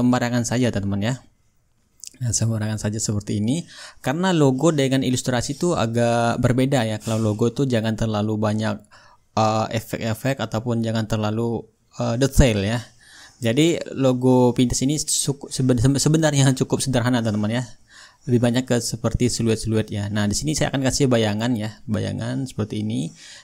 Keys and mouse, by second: 15.5-16.6 drag, 20.4-23.4 drag.